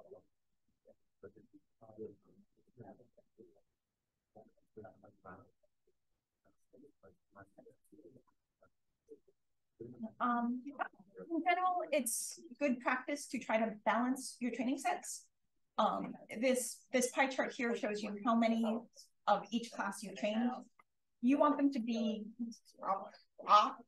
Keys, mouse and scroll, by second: 0.2 d, 3.0 click, 3.2 d, 4.0 click, 5.4 d, 5.9 d, 7.4 space, 7.5-8.2 drag, 8.6 d.